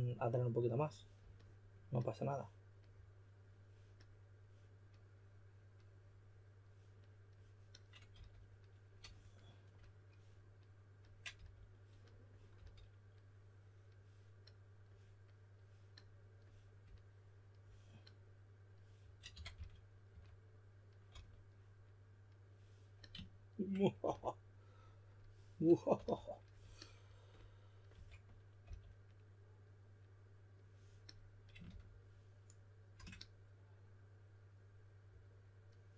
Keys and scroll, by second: 8.1 s, 11.3 s, 12.5 typing, 19.0-21.0 typing, 25.9 s, 27.9-28.6 typing, 31.6 shift+f, 32.9 typing.